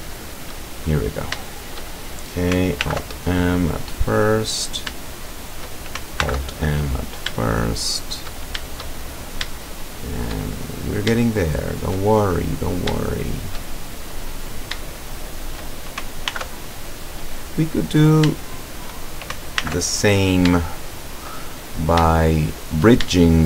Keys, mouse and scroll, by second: 1.1 shift+right click, 1.6 shift+right click, 2.8 alt+m, 3.5 click, 4.8 shift+right click, 5.3 shift+right click, 6.3 alt+m, 6.8 alt+click, 7.6-8.4 shift+middle drag, 9.2 shift+scroll down 3, 9.7-10.5 shift+middle drag, 10.6 shift+scroll down 2, 11.3-12.1 shift+middle drag, 12.1-12.7 shift+scroll up 1, 13.1-13.7 shift+middle drag, 13.7-14.1 shift+scroll up 1, 14.6 shift+right click, 15.2 shift+right click, 16.4 alt+m, 16.9 alt+click, 18.0 shift+right click, 18.6 shift+right click, 19.6 alt+m, 20.0 alt+click, 20.6 shift+middle click, 20.8 shift+scroll up 1, 21.2 shift+middle click, 23.2-23.4 shift+middle drag.